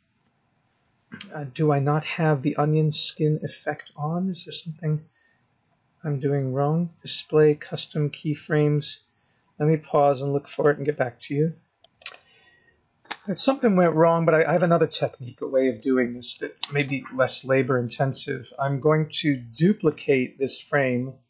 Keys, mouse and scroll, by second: 1.6 scroll down 4, 4.6-6.0 scroll down 2, 19.7 shift+d.